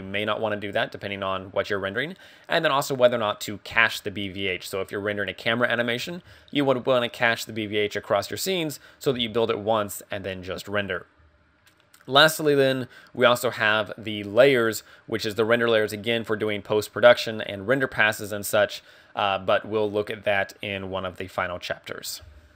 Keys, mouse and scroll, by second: 12.0 click, 14.3 click, 14.3-15.1 scroll down 2, 15.1-16.1 scroll down 3, 16.6-18.3 scroll down 2.